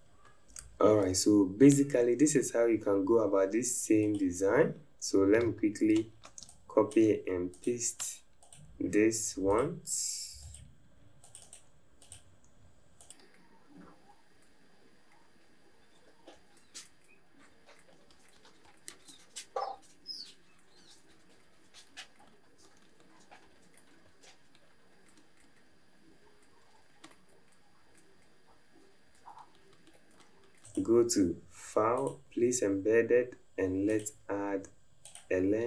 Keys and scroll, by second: 6.4 alt+space, 27.1 alt+space, 29.9 alt+space.